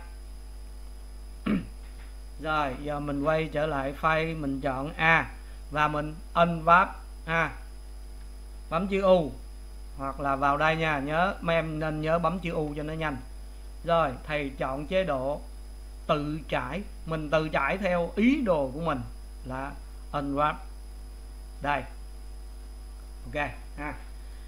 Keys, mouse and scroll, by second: 4.0 click, 5.0 a, 23.1 Left, 24.2 click.